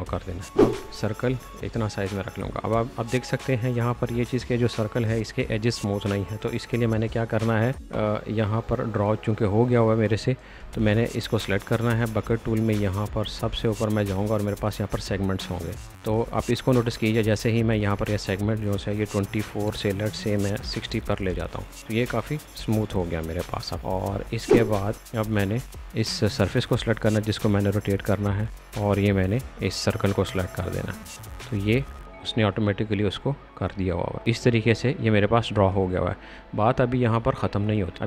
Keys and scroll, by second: 4.1 space, 10.6 space, 20.2-21.1 typing, 21.2 Return, 35.7 space.